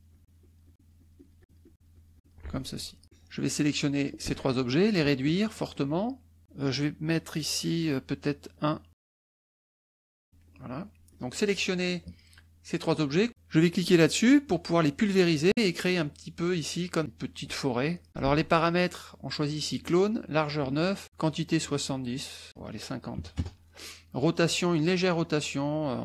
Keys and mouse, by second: 3.0-4.2 drag, 5.0-6.4 ctrl+drag, 7.1 right click, 8.5 click, 8.9 click, 9.6-10.8 ctrl+drag, 11.0 ctrl+click, 11.8 click, 13.8 click, 14.6 middle click, 18.1 ctrl+z, 22.5 click, 23.2 KP_5, 23.9 KP_0, 25.2 click.